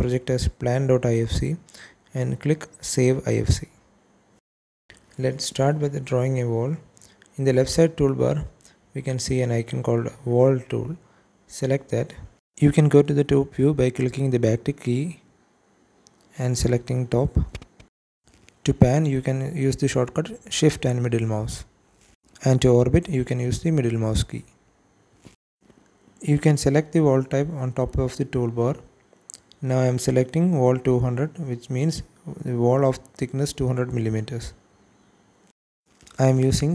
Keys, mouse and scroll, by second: 12.1 click, 13.9 `, 17.9 scroll up 1, 18.4 shift+middle click, 19.5-19.8 scroll up 2, 20.0-20.3 shift+middle drag, 20.4-21.5 scroll up 2, 20.9 middle click, 23.5 `, 24.5 scroll down 2, 24.9 shift+middle click, 28.9-32.6 drag, 33.3 shift+middle click, 34.3 shift+middle click, 36.1-36.7 shift+drag, 36.1 shift+right click.